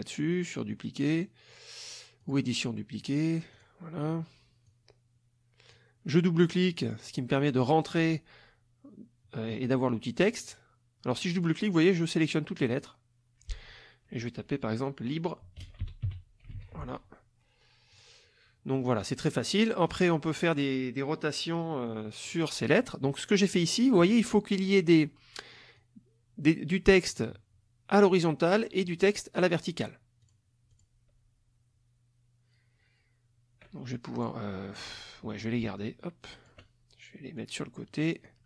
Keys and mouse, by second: 2.2 click, 3.6 click, 4.7-5.9 drag, 6.7 click, 10.3 click, 11.2 click, 12.6 click, 15.4-17.0 typing, 17.9 click, 18.7 middle click, 19.1 middle click, 19.9 click, 22.2 click, 22.9 middle click, 24.1 middle click, 25.7-27.1 drag, 28.9 click, 30.2 click, 30.7 click, 34.2 click, 35.0 shift+click, 35.8 ctrl+shift+click, 37.4-38.4 drag.